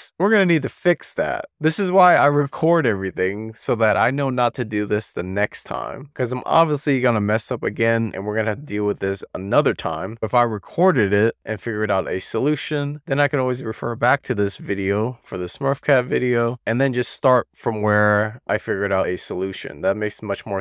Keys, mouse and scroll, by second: 7.1-9.2 middle drag, 9.4 shift+middle click, 10.2 middle click, 17.7 shift+middle click, 18.6-20.6 middle drag.